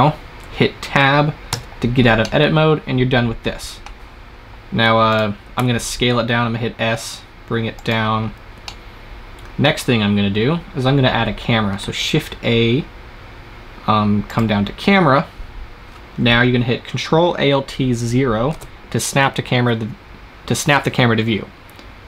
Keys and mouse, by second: 1.4 Tab, 2.1-4.3 middle drag, 5.0-6.7 right drag, 5.5 s, 8.1 click, 11.7 shift+a, 15.3-17.5 middle drag, 18.4 ctrl+alt+KP_0.